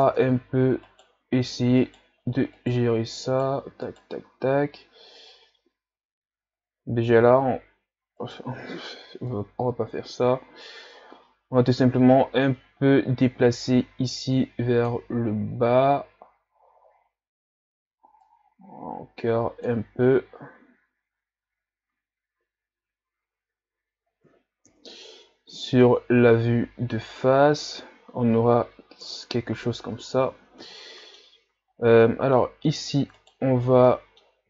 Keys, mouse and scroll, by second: 0.0 Tab, 0.9 right click, 1.8 shift+right click, 2.6 shift+right click, 3.3 shift+right click, 3.8 shift+right click, 7.1 s, 9.3-12.3 drag, 15.6-16.8 scroll up 1, 16.8-18.2 scroll up 1, 18.2 scroll up 1, 18.3-20.3 drag, 20.3-20.8 scroll up 4, 22.0 ctrl+scroll up 1, 24.7 KP_1, 29.0 KP_3, 30.0 a, 30.6-31.6 middle drag, 31.6-32.0 scroll up 1, 32.0-32.7 middle drag, 32.7-33.2 scroll up 3, 33.2 right click, 33.9-34.4 middle drag.